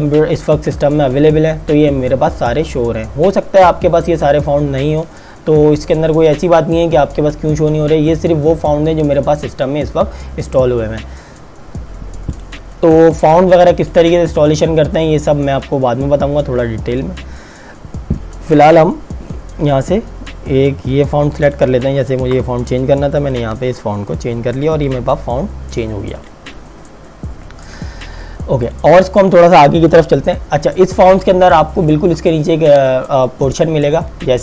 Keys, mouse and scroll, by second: 3.3-4.5 scroll up 1, 12.5 click, 21.5 click.